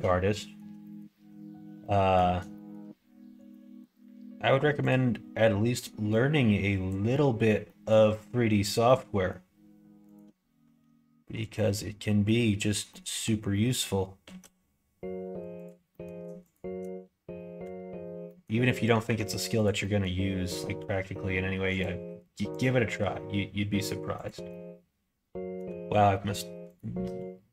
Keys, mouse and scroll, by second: 0.2 shift+middle click, 0.8 middle click, 1.8 middle click, 2.5 shift+middle click, 3.4 middle click, 4.8 click, 6.1 click, 7.0 scroll up 1, 7.1 middle click, 7.4 scroll down 1, 7.6 scroll up 1, 7.7 middle click, 8.8 middle click, 10.1 click, 11.4-12.8 drag, 12.8 middle click, 14.2 ctrl+z, 15.5 click, 15.9 middle click, 16.4 shift+click, 17.6 f, 18.2 middle click, 19.0 1, 19.5 click, 19.7 middle click, 20.7 g, 22.5 click, 22.8 g, 24.4-25.5 middle drag, 26.9 g.